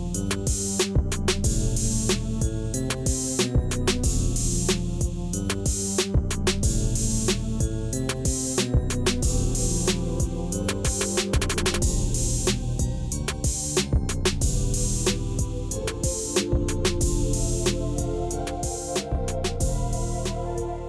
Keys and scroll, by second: 13.4 shift+a, 14.3 n, 14.8 o, 15.0 i.